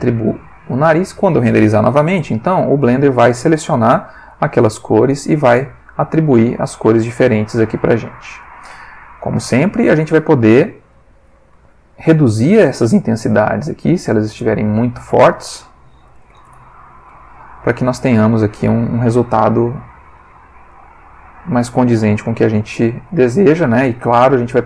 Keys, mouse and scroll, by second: 0.3 click, 0.8 Tab, 1.7 F12, 7.4 click, 8.4 click, 9.2 middle click, 10.9-11.4 middle drag, 11.7-12.7 ctrl+middle drag, 13.7 ctrl+click, 14.2 ctrl+click, 14.9 click, 16.1 BackSpace, 16.3 1, 16.4 Return, 20.7-21.2 drag, 21.4 click, 23.0 ctrl+middle click, 24.2 click.